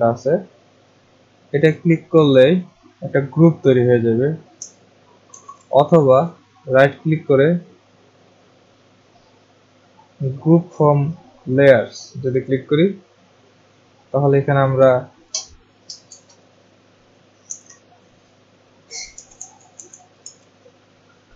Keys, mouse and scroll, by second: 2.6 click, 5.3 ctrl+z, 6.2 right click, 12.5 click, 16.0 f, 17.4 r, 18.9-20.7 typing, 19.3-21.0 drag.